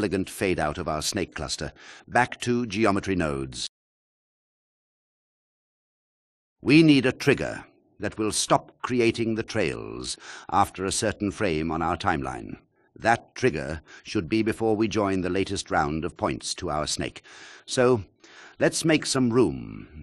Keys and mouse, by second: 2.8 click, 3.9-6.1 drag, 6.7 alt+shift+click, 11.2 n, 11.9 n, 12.7 click, 17.8 click.